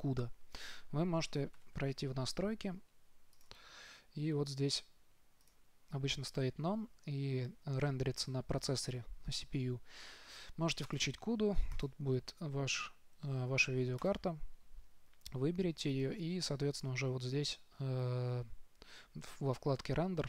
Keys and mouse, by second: 2.2 ctrl+alt+u.